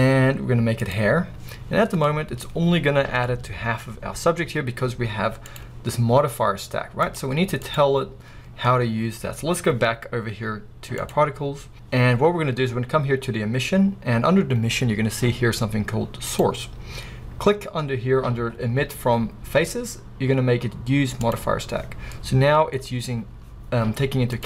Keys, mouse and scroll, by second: 1.6-2.1 scroll down 2, 2.1-21.3 middle drag, 2.4-3.1 scroll up 2, 3.1 scroll down 2, 21.3 click, 21.9 scroll down 2, 22.2-24.4 middle drag, 22.7-24.2 scroll up 2, 24.2-24.4 scroll up 1.